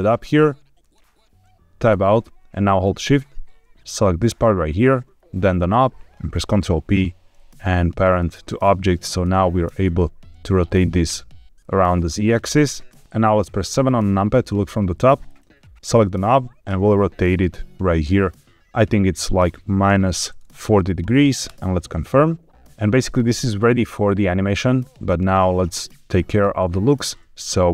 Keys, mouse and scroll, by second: 0.7 shift+click, 1.8 Tab, 3.8 shift+click, 5.4 shift+click, 6.5 ctrl+p, 9.1 click, 9.6 r, 9.8 z, 11.4 Escape, 12.3-12.6 scroll down 2, 13.6 KP_7, 15.2 click, 16.6 r, 19.8 KP_Subtract, 20.3 KP_4, 20.4 KP_0, 21.4 KP_Enter.